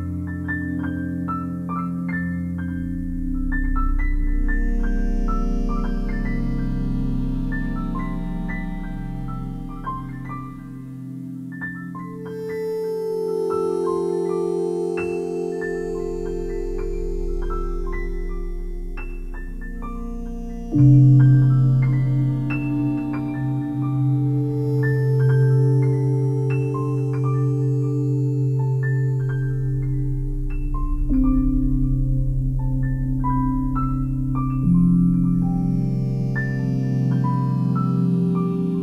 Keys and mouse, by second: 1.2 click, 2.4 ctrl+alt+click, 4.2 click, 4.9 click, 6.8-38.8 Delete, 8.5 click, 9.3 alt+click, 10.6 click, 11.3 click, 12.1 shift+click, 13.1 m, 14.4 click, 16.8-18.6 shift+drag, 19.0-20.8 shift+drag, 21.2-22.5 shift+drag, 23.6 f, 24.3 alt+click, 25.9 click, 26.9-29.4 alt+drag, 30.1 ctrl+alt+click, 30.7-33.0 alt+drag, 33.1 ctrl+alt+click, 33.5 alt+click, 34.2-36.1 ctrl+alt+drag, 36.7-38.8 drag.